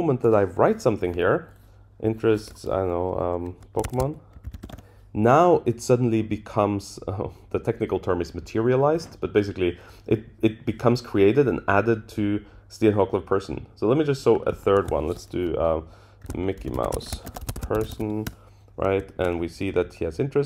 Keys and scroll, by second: 18.3 Return, 19.1 super+Down.